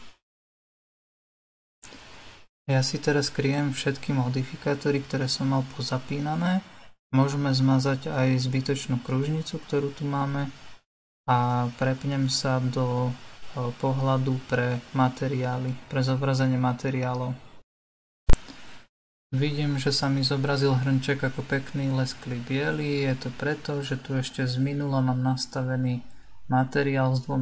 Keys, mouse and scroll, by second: 3.4 click, 5.5 click, 5.9 click, 6.4 click, 7.1 click, 10.1 click, 10.9 Delete, 11.9 click, 13.1-16.7 middle drag, 16.7 click, 17.6-20.6 middle drag, 21.8-24.8 drag.